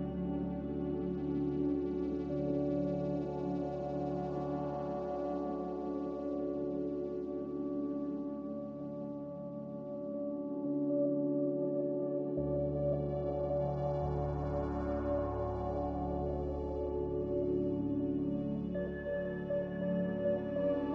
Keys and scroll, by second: 0.6 q, 6.3 ctrl+z, 9.0 q, 11.0 ctrl+z, 14.9 1, 14.9 0, 15.3 Return, 19.6 5, 19.9 Return.